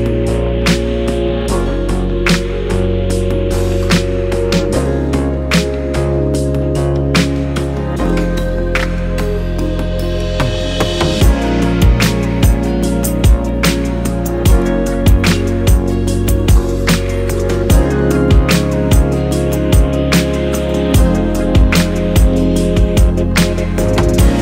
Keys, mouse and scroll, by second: 6.4 click, 7.9 Delete, 9.4 click, 11.6 click, 13.9 click, 15.1-15.7 scroll down 1, 19.2-20.7 scroll up 2, 20.7 Tab, 20.7-21.9 scroll up 1, 21.9-24.4 scroll up 1.